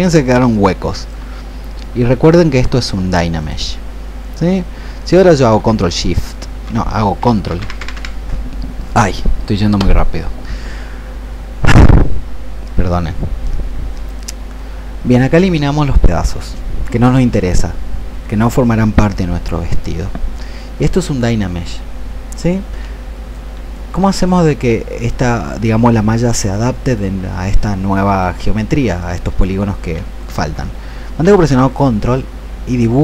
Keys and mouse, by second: 13.3-23.3 drag, 23.8-31.1 drag.